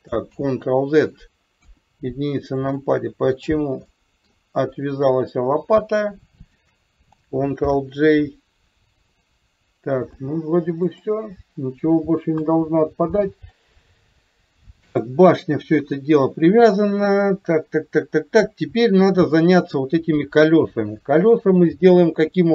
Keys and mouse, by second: 0.4 ctrl+z, 1.7 KP_1, 2.8 middle click, 3.9-4.3 middle drag, 5.3 click, 6.4 shift+click, 7.7 ctrl+j, 9.3 click, 10.2 click, 12.4 KP_3, 19.0 click, 21.8-22.5 drag.